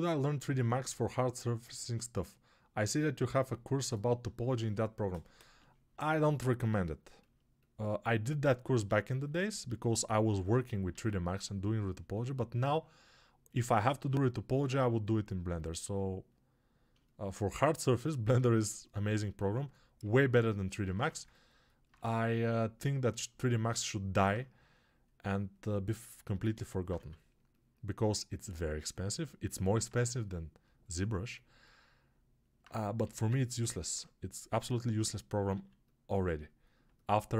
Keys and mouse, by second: 10.8 alt+q, 13.5-19.9 alt+drag, 19.9 ctrl+alt+right click, 20.2-31.4 alt+drag, 20.8 1, 26.9 2, 32.9 g, 35.5 alt+q.